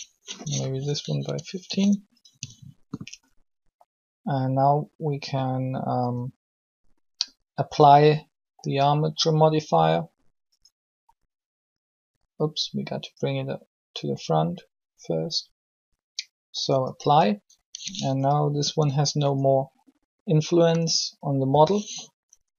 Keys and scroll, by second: 1.0-1.4 typing, 18.6 r, 20.6 a, 22.2 a.